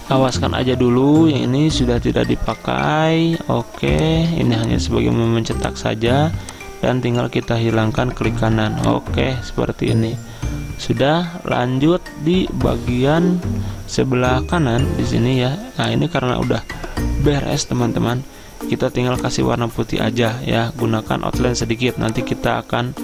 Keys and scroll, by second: 2.5 ctrl+z.